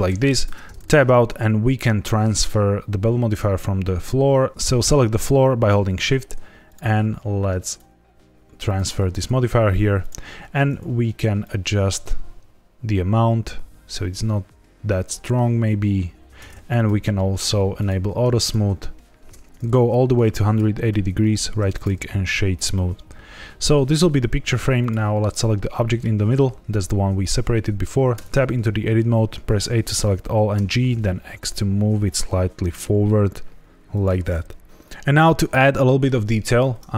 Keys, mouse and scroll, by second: 0.4 Tab, 0.8-1.2 scroll down 2, 4.5 ctrl+z, 4.5 shift+click, 5.5 shift+click, 6.6 click, 7.6 click, 9.1 scroll up 2, 9.9 click, 11.3 shift+click, 16.7 click, 17.7 click, 18.4 shift+click, 19.2 ctrl+z, 19.8 click, 21.2 right click, 22.7 middle click, 24.7 click, 25.7 middle click, 28.1 Tab, 28.7 a, 29.7 middle click, 30.5 g, 30.8 x, 33.9 click, 35.5 middle click.